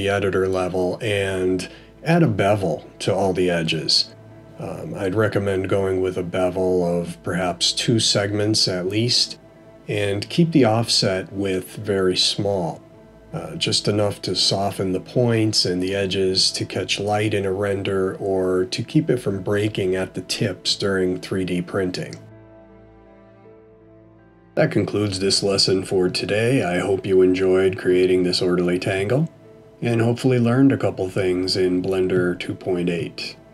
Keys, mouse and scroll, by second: 2.3 a, 5.5 ctrl+b, 19.7 middle click, 21.5-22.3 scroll up 2, 22.4 middle click, 24.4 Tab, 25.2 middle click.